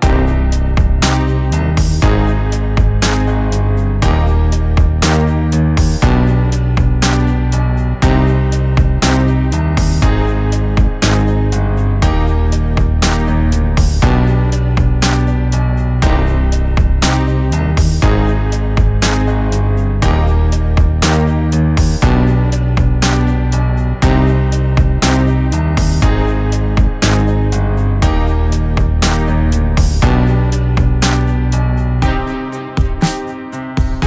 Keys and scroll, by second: 4.2 [, 4.2 [, 5.7 [, 5.7 [, 9.2 [, 9.7 [, 18.1 ctrl+t, 20.2 Left, 20.3 Left, 22.2 Right, 23.0-25.8 Right, 27.8 ], 27.8-29.2 ], 28.5 Escape, 28.6 Escape, 28.7 Caps_Lock, 28.9 ].